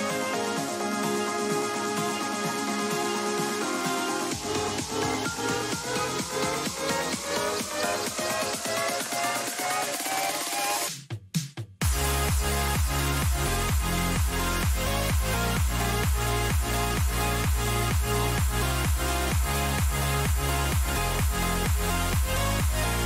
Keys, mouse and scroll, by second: 1.0-2.4 middle drag, 7.3 middle click, 10.6 Tab, 11.3-13.0 middle drag, 13.2 a, 13.6 a, 14.3-16.2 right drag, 16.2 a, 18.3-21.5 middle drag, 22.1-23.0 middle drag.